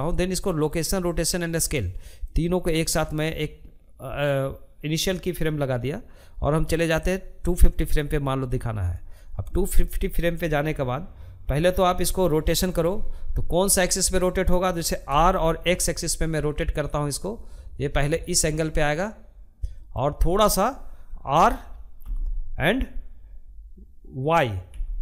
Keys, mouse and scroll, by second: 3.8-13.6 drag, 13.6 r, 20.5 r.